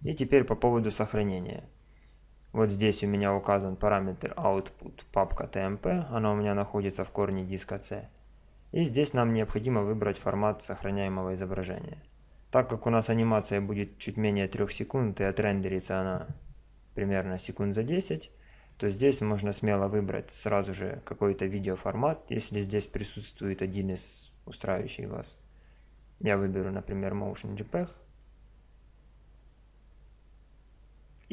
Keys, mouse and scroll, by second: 18.7-20.7 drag.